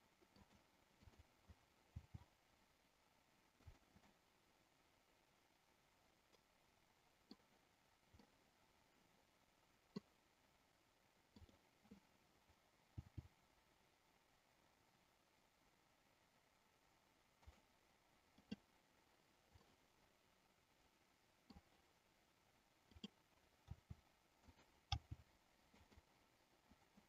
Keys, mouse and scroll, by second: 0.5 click, 0.8 click, 2.0 r, 4.0-7.3 middle drag, 8.2-10.0 middle drag, 11.3 click, 12.8 g, 17.3 click, 19.6-21.6 middle drag, 22.8 click, 23.6 r, 24.5 click, 25.0 g, 25.8 click.